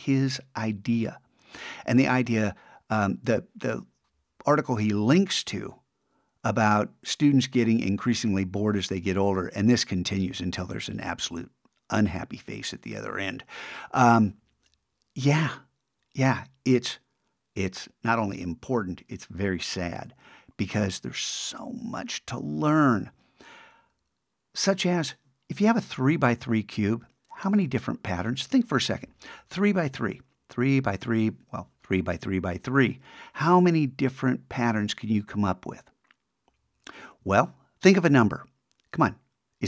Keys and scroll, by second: 19.9 super+`, 37.2 super+Tab.